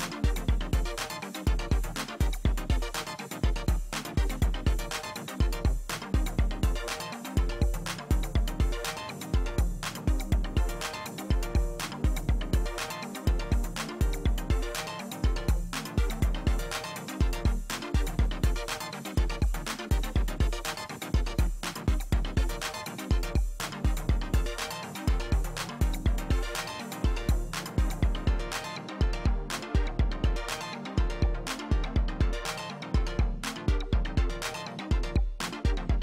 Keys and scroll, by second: 7.8 ctrl+alt+z, 23.3 space, 24.2 space, 25.3 space.